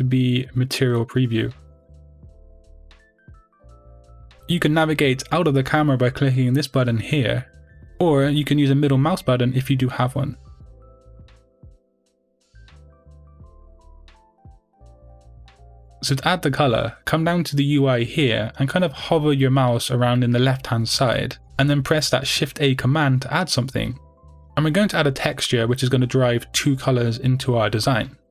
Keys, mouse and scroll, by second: 4.9-5.5 scroll down 2, 5.5 scroll up 2, 5.8-11.3 middle drag, 6.4 scroll down 1, 11.3 click, 12.0 click, 12.7 click, 13.1 click, 13.6 click, 14.8-18.8 middle drag, 16.4-16.8 scroll down 2, 17.4-18.8 scroll down 2, 18.8 click.